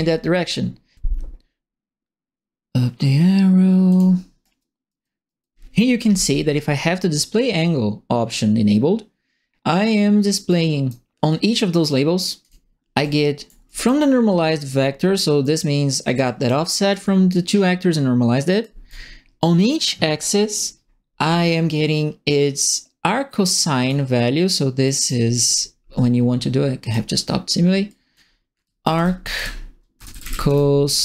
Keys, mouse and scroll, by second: 0.0-0.3 typing, 3.8 click, 4.4 right click, 4.9 right click, 5.2 right click, 7.0 middle click, 10.4 right click, 11.3 click, 12.4 click, 13.1 ctrl+middle click, 13.6 right click, 14.2 middle click, 14.6 middle click, 15.4 right click, 15.9 click, 16.9 click, 18.6 right click, 23.8 click, 24.8 click, 26.8 click, 27.8 click, 28.3-31.0 typing.